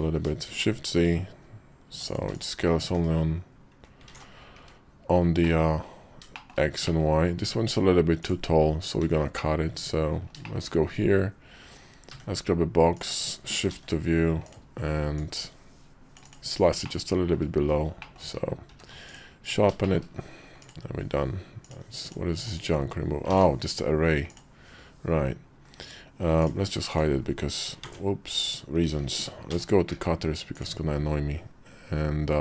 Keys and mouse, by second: 2.7 /, 3.8 alt+z, 4.4 `, 5.1 middle click, 5.6 KP_5, 6.1 shift+middle click, 6.6 middle click, 8.9 `, 9.7 KP_5, 10.2 shift+middle click, 11.8 d, 13.4 shift+v, 15.0-16.2 drag, 16.6 middle click, 17.8 shift+middle click, 18.5 q, 19.6 click, 20.4 click, 21.4 click, 21.8 click, 22.1 x, 23.1 ctrl+z, 24.1-25.2 drag, 25.4 KP_5, 26.1 click, 27.7 ctrl+z, 28.1 click, 29.3 m.